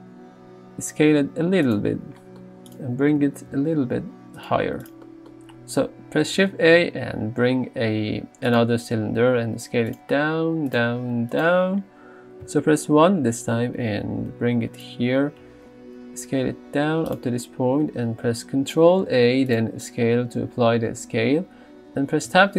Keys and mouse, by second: 0.5 s, 3.2 g, 5.1 z, 6.5 shift+a, 9.4 s, 10.2 s, 11.0 s, 12.5 KP_1, 13.8 g, 15.4 s, 18.9 ctrl+a, 22.3 Tab.